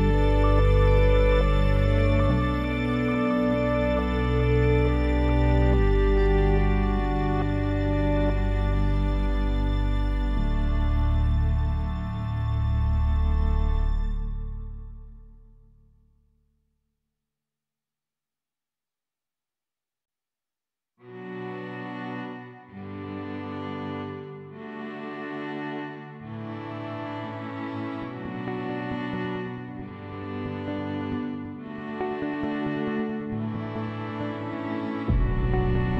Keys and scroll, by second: 13.3 6, 13.6 Return, 16.0 7, 16.5 Return.